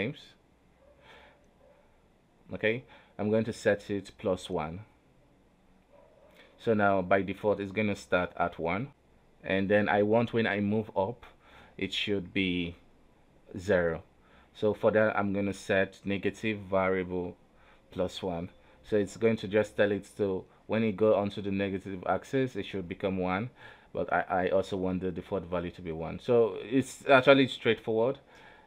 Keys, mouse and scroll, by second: 8.9 right click, 8.9 g, 10.3 right click, 11.7 right click, 12.2-13.3 drag, 13.3 right click, 13.7 right click, 16.3-19.5 right drag, 24.2 right click, 24.4 alt+g, 25.6 right click, 26.7 right click, 27.0 g, 27.8 z.